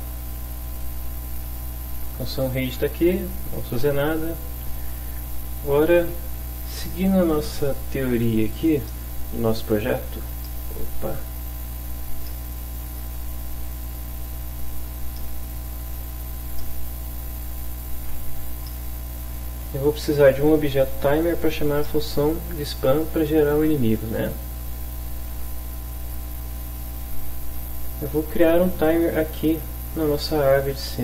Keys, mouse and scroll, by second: 7.1 alt+Tab, 10.5-12.0 ctrl+drag, 12.3-15.0 ctrl+shift+drag, 15.2 shift+click, 16.6-18.3 ctrl+drag, 18.7 middle click, 21.9-22.9 middle drag, 25.4 alt+Tab, 28.3 click, 30.7 click.